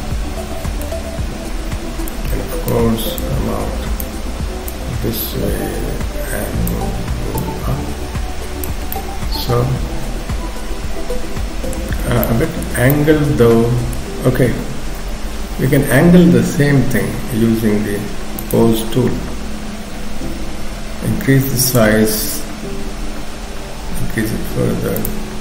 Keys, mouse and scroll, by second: 1.2 KP_3, 2.1 click, 3.2 click, 7.4 click, 8.9 middle click, 11.9-12.7 scroll down 3, 12.3 middle click, 12.9 middle click, 14.9 KP_7, 15.3-15.7 scroll up 2, 18.4 click, 20.5 f.